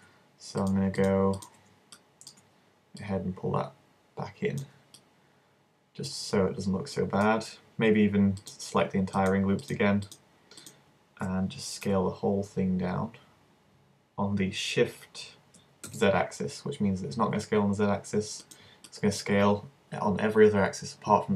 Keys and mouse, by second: 0.6-3.0 middle drag, 3.0-4.6 drag, 11.9 s, 13.7-15.1 drag, 18.6 click, 18.9-20.9 middle drag.